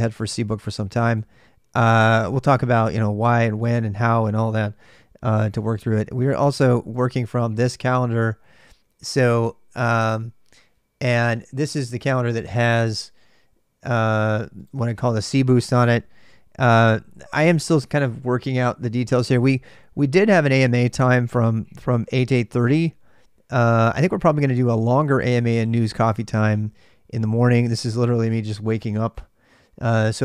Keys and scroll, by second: 6.9 ctrl+alt+m.